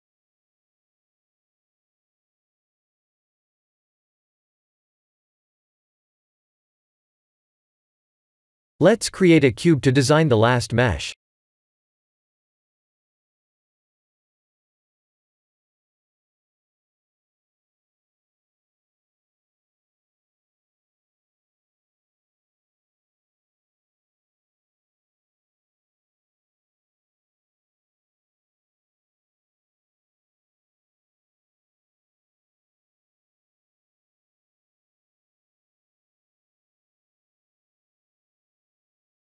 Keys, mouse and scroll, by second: 0.4 click, 0.7 right click, 2.0-2.4 scroll down 4, 2.5 shift+middle click, 3.4-4.2 scroll up 3, 4.2 KP_1, 5.3 click, 5.9-6.4 shift+middle click, 6.1 shift+middle click, 6.6 shift+middle click, 8.9 shift+a, 13.4 g, 15.9 shift+z, 16.3 s, 18.1 g, 20.2-20.9 scroll up 4, 20.9 scroll up 1, 20.9 s, 22.4 g, 25.5 shift+middle click, 26.2-27.5 scroll up 1, 27.5 middle click, 27.5 scroll up 2, 27.8 middle click, 28.1 middle click, 28.5 KP_3, 29.0 KP_1, 29.8 KP_Decimal, 30.0 KP_3, 30.9-31.5 scroll down 4, 32.0-32.5 scroll down 3, 32.5 g, 35.0 s, 36.9 g.